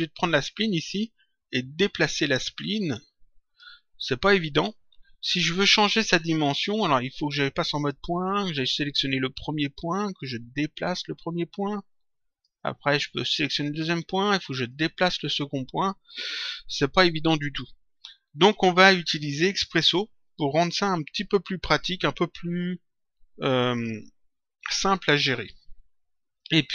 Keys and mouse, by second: 2.0 click, 4.4 click, 7.7 click, 8.9 click, 10.8 click, 13.2 click, 14.6 click.